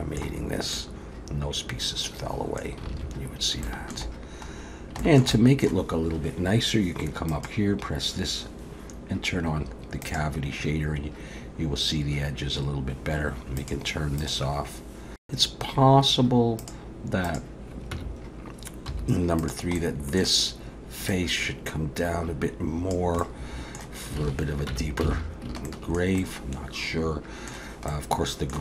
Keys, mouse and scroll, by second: 0.5 scroll up 1, 0.7 middle click, 2.9 alt+a, 3.3 scroll up 1, 3.6 shift+middle click, 4.2-4.7 scroll down 1, 4.7 scroll down 1, 5.0 shift+middle click, 5.3 middle click, 7.3 click, 13.6 click, 14.2 click, 14.7-15.1 scroll up 1, 15.2 click, 16.6 click, 17.3 click, 17.9 Tab, 18.9 3, 19.4 click, 19.8 middle click, 21.1 click, 23.2 middle click, 24.2 alt+a, 24.7 Tab, 25.1 alt+a, 25.3-25.7 scroll down 2, 25.7 shift+middle click, 26.2 middle click, 27.9 middle click.